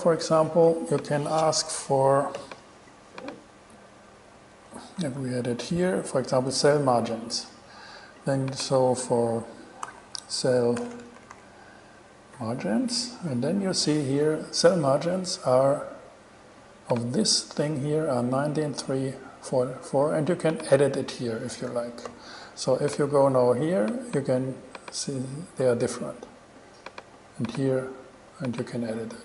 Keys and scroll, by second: 5.4 shift+super+e, 7.3 shift+super+e, 9.8-11.4 typing, 12.7 a.